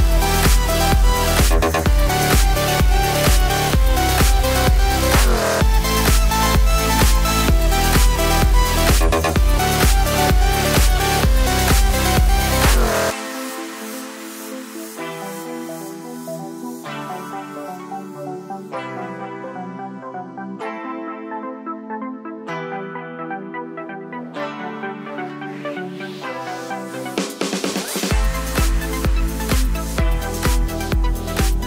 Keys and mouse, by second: 2.2 ctrl+r, 2.7 g, 3.2 KP_1, 3.8 ctrl+KP_1, 4.0 ctrl+KP_3, 5.4 ctrl+r, 6.1 ctrl+r, 7.4 ctrl+KP_3, 7.7 g, 8.3 g, 9.5 click, 9.6-11.0 ctrl+shift+middle drag, 9.9 ctrl+KP_3, 10.0 ctrl+KP_6, 11.0 click, 11.1-12.3 ctrl+shift+middle drag, 11.4 ctrl+KP_3, 11.5 g, 12.3 click, 12.4-13.9 ctrl+shift+middle drag, 12.7 ctrl+KP_3, 12.9 g, 13.3 g, 13.9 shift+click, 14.2-24.8 shift+middle drag, 15.0 ctrl+KP_3, 15.5 s, 18.0 2, 18.6 ctrl+KP_3, 18.9 g, 19.9 alt+z, 21.1 ctrl+KP_7, 22.3 ctrl+r, 22.8 ctrl+r, 23.3 g, 23.7 click, 23.8 g, 24.4 g, 24.8 click, 25.6 middle click, 25.6 g, 26.0 ctrl+click, 26.1 ctrl+r, 26.1-31.6 middle drag, 26.7 g, 27.0 g, 27.4 g, 28.5 ctrl+g, 28.6 ctrl+r, 29.3 g, 29.6 click, 29.6 g, 30.0 g, 30.4 g.